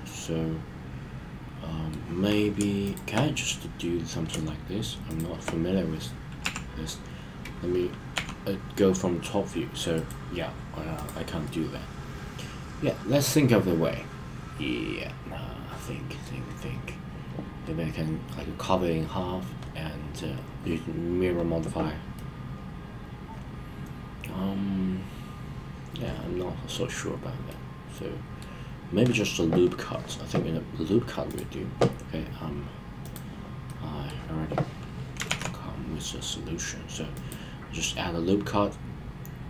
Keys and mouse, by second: 2.8 shift+click, 3.4-4.1 middle drag, 6.4 KP_7, 8.1 e, 10.0 right click, 10.9 click, 11.4-16.3 middle drag, 22.1-26.7 middle drag, 27.4-28.5 middle drag, 31.3 click, 33.0 click, 33.6-34.1 middle drag, 35.2 ctrl+r.